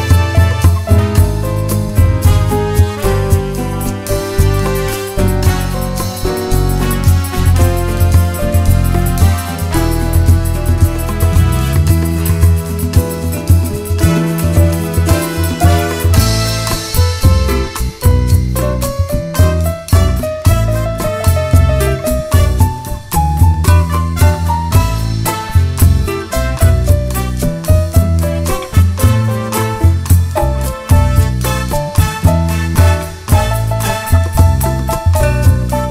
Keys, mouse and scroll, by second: 1.3 s, 1.8 scroll down 1, 2.0 `, 3.2 ctrl+click, 3.7 KP_Decimal, 4.2 1, 4.6 KP_1, 5.8 s, 11.5-11.9 scroll up 1, 11.9 click, 12.1-12.5 scroll down 1, 13.7 scroll up 1, 13.9 `, 14.4 g, 16.4 click, 17.1 `, 17.4 scroll up 1, 17.6 `, 18.2 scroll down 1, 18.4 `, 19.5 scroll up 1, 20.1 click, 21.0 g, 21.5 click, 22.0 `, 22.7 click, 23.1 g, 23.6 right click, 23.7 `, 24.4 `, 25.3 shift+click, 26.4 alt+a, 26.9-27.9 scroll down 1, 27.9 click, 29.5 g, 32.5 click, 33.2 g, 34.3 click, 35.5 Tab, 35.8 alt+a.